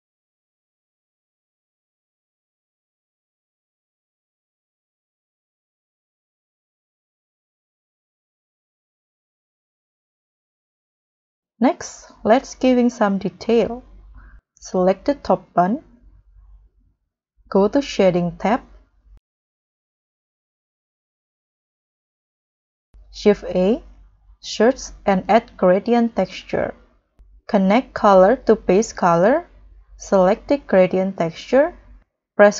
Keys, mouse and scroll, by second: 5.7 scroll up 1, 15.9-17.0 scroll up 4, 18.2-18.5 scroll down 1, 18.7-19.7 scroll up 10, 19.9-20.2 scroll down 5, 20.7-21.2 scroll down 12, 21.3-22.0 scroll up 10, 22.3 scroll up 1, 23.4 shift+a, 24.4 g, 24.5 r, 24.7 a, 24.7 d, 29.3-29.8 scroll up 1.